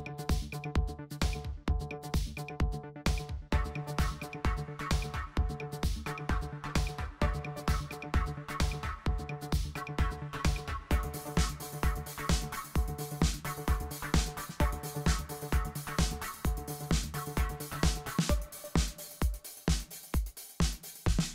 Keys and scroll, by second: 0.0-1.3 typing, 4.6 alt+shift+Left, 4.8 alt+shift+Left, 4.8 alt+shift+Left, 5.0 alt+shift+Right, 5.1 alt+shift+Right, 5.4 alt+shift+Up, 5.6 alt+shift+Up, 5.6 alt+shift+Up, 6.7 v, 7.6 super+z, 10.9 super+z, 13.9 super+j, 14.5 super+j, 15.2 super+j, 16.4-19.3 typing, 20.7 super+0.